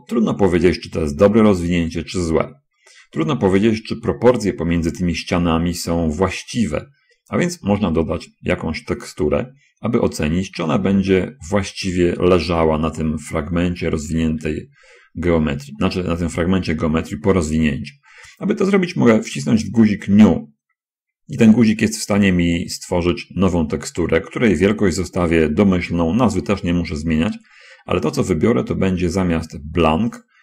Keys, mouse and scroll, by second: 13.1-14.3 middle drag, 14.6 /, 23.3 click.